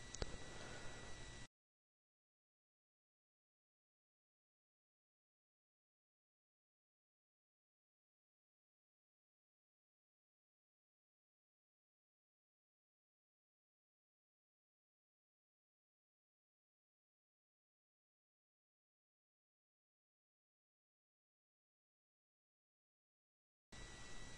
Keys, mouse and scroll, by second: 0.7 click, 1.8 click, 5.6-6.7 drag, 7.1-8.6 scroll down 1, 9.3-11.6 scroll down 1, 12.2-15.5 drag, 15.9 click, 18.3 click, 19.5-21.2 drag, 23.0 click.